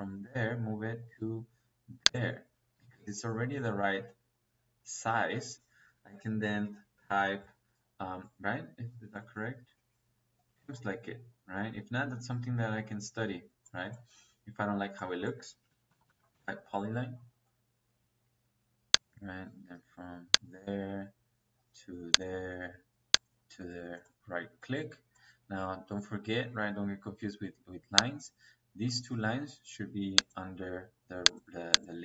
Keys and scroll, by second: 5.4 Escape, 15.3 Escape, 15.9 p, 16.1 o, 16.2 y.